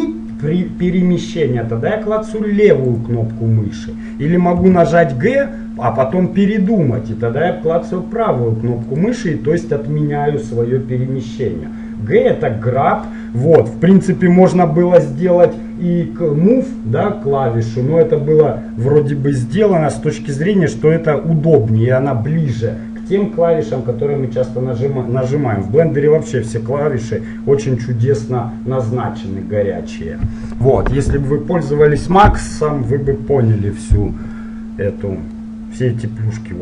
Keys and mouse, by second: 4.8 g, 34.5-36.6 middle drag.